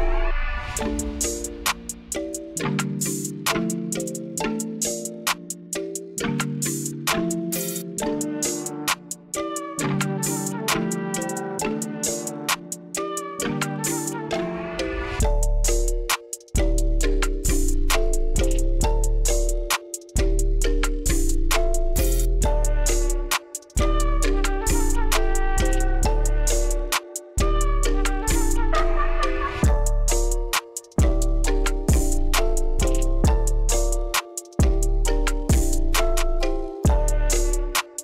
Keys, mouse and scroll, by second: 0.6-1.0 scroll down 2, 1.7-3.7 scroll down 2, 4.3 click, 6.2 middle click, 7.4 click, 10.0 middle click, 11.0 click, 16.1 click, 19.1 click, 20.1-20.9 middle drag, 21.8 click, 22.9 middle click, 25.4 click, 26.3 click, 27.3-27.9 middle drag, 28.6 click, 30.0 click, 30.1 click, 34.2 click, 34.6 middle click, 35.3 scroll down 1, 35.7-37.9 middle drag.